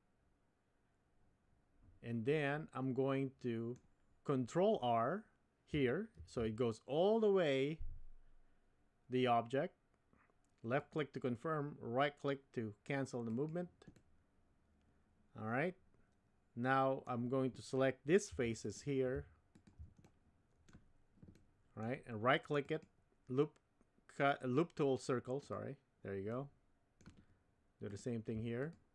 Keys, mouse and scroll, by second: 6.2 ctrl+r, 14.1-17.1 middle drag, 18.4 3, 18.6 click, 19.6 shift+click, 20.0 middle click, 21.3 middle click, 22.7-25.5 right drag, 26.3 middle click.